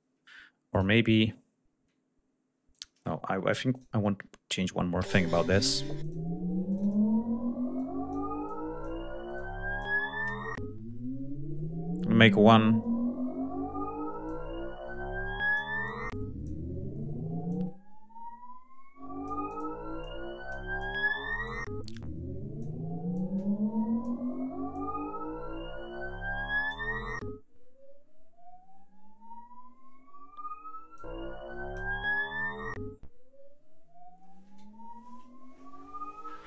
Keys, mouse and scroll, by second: 0.4 click, 2.4 click, 3.2 g, 3.4 click, 4.6 l, 5.7 click, 6.3 click, 7.4 click, 8.1 click, 9.0 click, 13.9 click, 15.5-16.3 drag, 17.1-19.4 drag, 19.7-20.4 drag, 20.4-21.3 drag, 21.6-22.4 drag, 22.8-23.9 drag, 24.4-26.5 drag, 30.6 click.